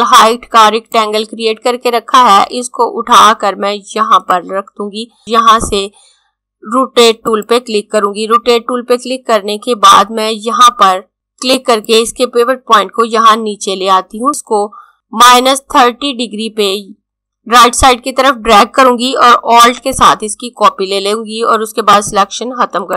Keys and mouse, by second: 0.9 click, 7.2 click, 11.5 click, 14.3 click, 21.8 click.